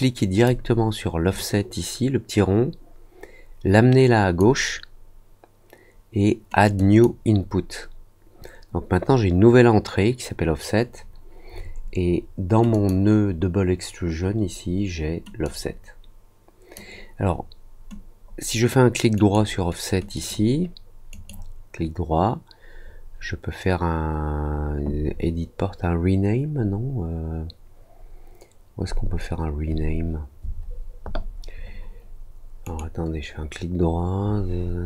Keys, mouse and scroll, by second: 1.3-4.3 drag, 6.7 click, 12.7 click, 15.4-16.7 drag, 19.1 right click, 20.1 click, 21.0 right click, 32.6 right click.